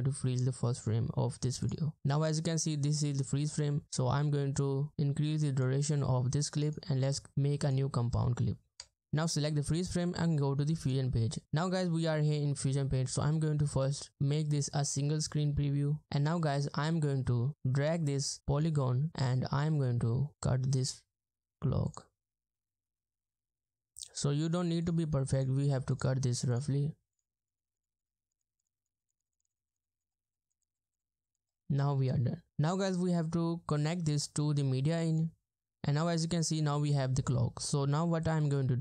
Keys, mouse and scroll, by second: 2.0 space, 3.6 space, 6.7 right click, 8.8 Return, 15.8 ctrl+scroll down 1, 16.0-16.5 ctrl+scroll up 1, 19.2-20.3 ctrl+scroll up 1, 20.3 ctrl+scroll down 1, 21.0-21.7 ctrl+scroll up 1, 22.4 scroll down 1, 22.7-23.1 scroll up 1, 23.1 middle click, 27.3 middle click, 28.6 double click, 28.7 middle click, 29.3 double click, 29.9 middle click, 32.0-32.5 ctrl+scroll down 1, 32.5 ctrl+scroll up 1.